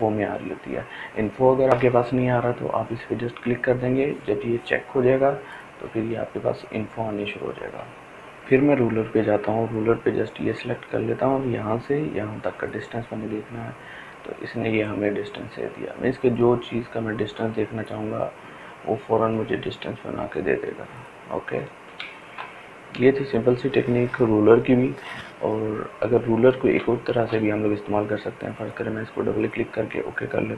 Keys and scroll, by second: 21.5 ctrl+space, 24.0 Delete.